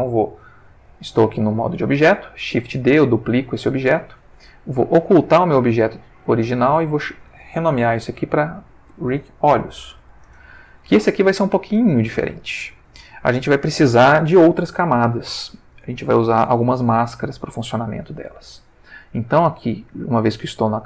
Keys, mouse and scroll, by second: 2.5 shift+d, 3.6 Escape, 5.4 click, 6.3 click, 7.9 End, 8.2 ctrl+shift+Left, 9.6-10.1 typing, 10.2 Return, 12.3-13.2 ctrl+middle drag.